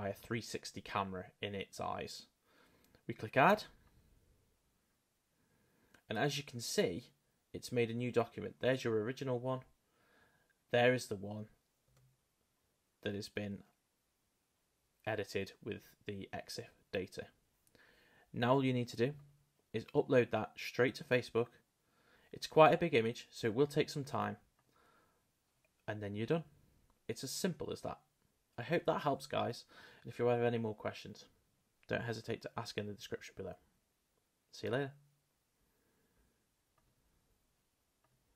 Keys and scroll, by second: 11.9 space.